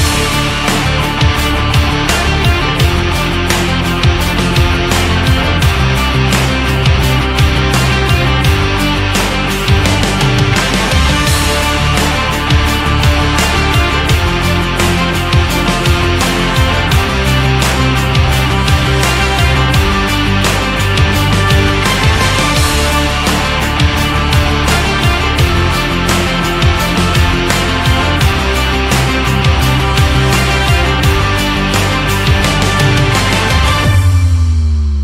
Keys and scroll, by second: 10.5 ctrl+z.